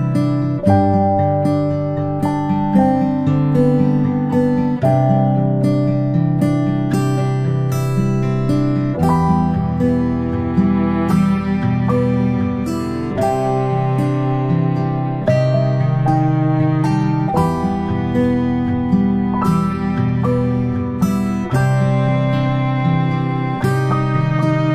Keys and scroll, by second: 12.0 ctrl+space, 12.2 ctrl+space.